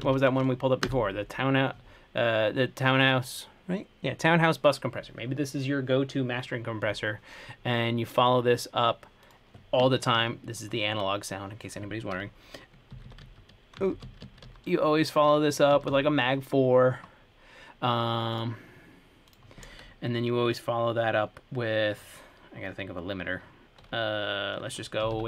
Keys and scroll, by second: 0.0-0.8 typing, 1.1 Return, 12.9-15.2 typing, 16.0 Down, 16.1 Return, 25.1-25.2 typing.